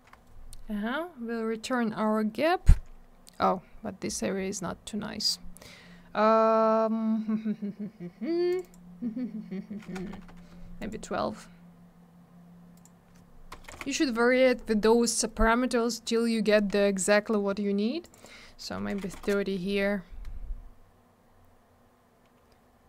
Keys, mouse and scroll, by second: 8.5 click, 8.5 click, 8.6 click, 8.7 click, 10.8 click, 10.9 click, 12.7 click, 12.8 click, 13.5 BackSpace, 13.7 2, 13.7 Return, 18.0 click, 18.1 click, 18.1 click, 18.2 click, 18.9 3, 19.1 Return, 21.1-21.8 scroll up 1, 21.8-22.4 scroll down 1.